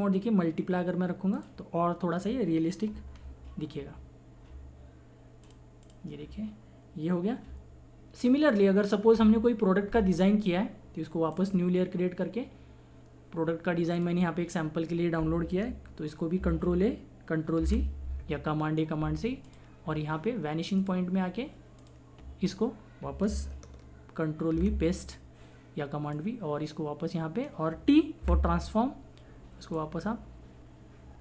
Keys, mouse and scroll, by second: 3.1 ctrl+=, 5.4 click, 8.5 click, 11.3 click, 13.9 click, 16.3 ctrl+a, 19.4 click, 24.5 ctrl+v, 26.1-28.2 drag, 28.2 t, 29.7-31.2 drag.